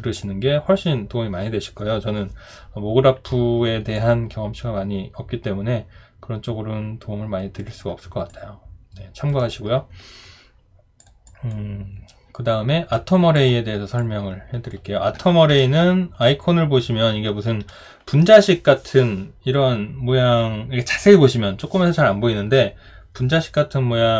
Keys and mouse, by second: 3.9 alt+click, 8.3 alt+click, 15.5 Delete.